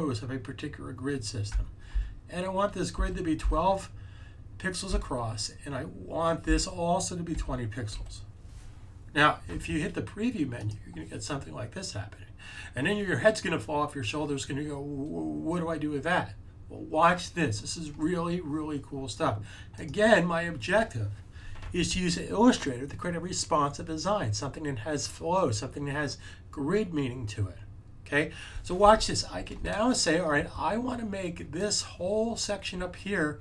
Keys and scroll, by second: 2.7-3.8 typing, 7.0-7.9 typing.